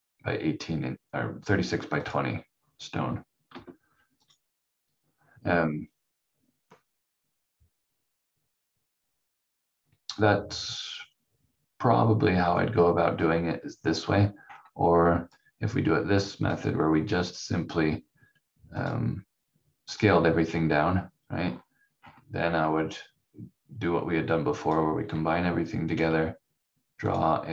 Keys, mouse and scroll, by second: 1.9 click, 3.5 F4, 4.2 click, 14.4-15.3 scroll up 1, 15.3 click, 21.1 scroll up 1, 24.6 click.